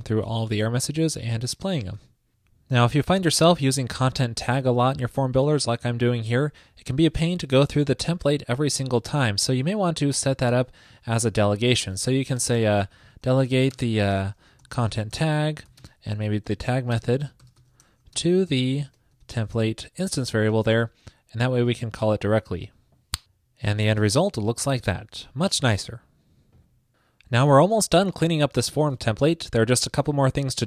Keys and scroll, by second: 2.1 super+s, 12.5 super+Return.